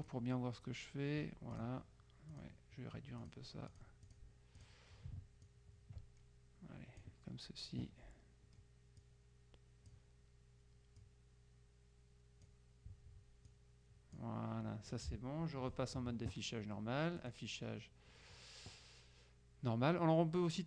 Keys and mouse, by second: 0.1 click, 1.6 click, 2.4 click, 3.3 click, 5.5-7.6 ctrl+drag, 9.1-10.4 drag, 11.0-13.0 drag, 13.6-14.8 drag, 17.4 click.